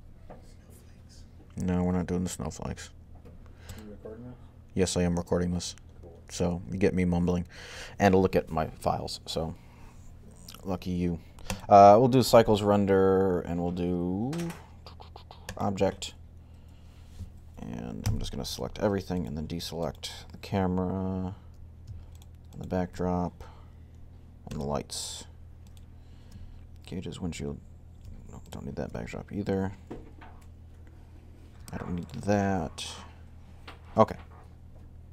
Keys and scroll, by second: 17.9 a, 21.3 a.